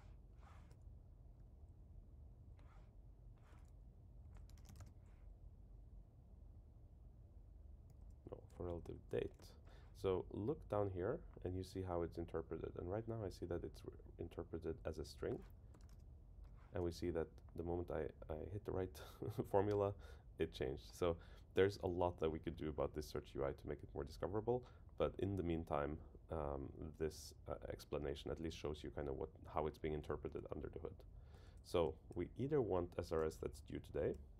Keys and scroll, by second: 4.2 alt+shift+Left, 8.0 super+Left, 8.5 alt+Right, 31.4 super+Left, 32.2 Down.